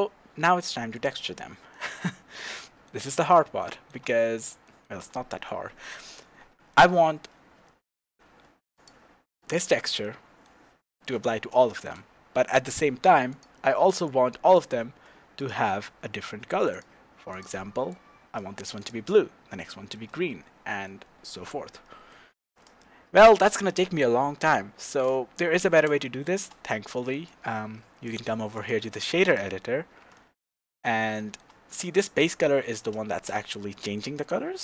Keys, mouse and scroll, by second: 0.9 click, 1.3-1.7 scroll down 1, 1.7-3.1 middle drag, 2.2-2.6 scroll down 1, 3.1 click, 3.6-6.0 shift+middle drag, 4.2-4.6 scroll up 2, 5.5-6.0 scroll up 2, 6.0 click, 6.7-8.7 shift+middle drag, 8.7 click, 9.4-10.0 drag, 10.0-13.3 middle drag, 11.7 shift+z, 13.3 click, 15.4 click, 16.7 click, 17.3 click, 18.8 click, 19.6-21.8 middle drag, 24.8 shift+z, 25.5 click, 26.0-27.2 shift+middle drag, 27.2-30.1 drag, 30.1-34.6 middle drag, 30.7-31.2 scroll up 2, 32.7-33.1 scroll up 2, 33.1 shift+z.